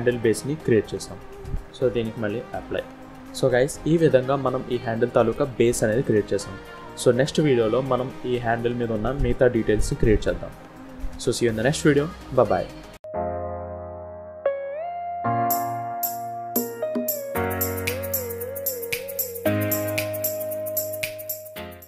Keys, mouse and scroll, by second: 0.4-0.9 scroll up 4, 0.9-1.8 scroll down 3, 1.8 click, 3.2 scroll down 1, 3.2 z, 3.3-3.9 scroll up 2, 4.6 click, 4.6 scroll down 1, 5.9 click, 7.0-8.3 scroll up 1, 8.3 click, 9.5 click.